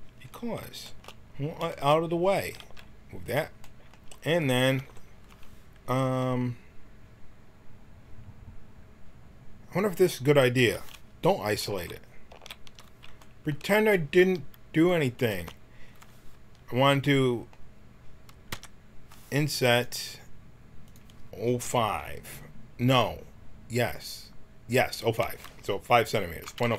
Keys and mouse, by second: 2.3 g, 4.7 t, 11.7 ctrl+z, 12.3 ctrl+z, 14.2 g, 18.5 i, 20.8-24.5 drag.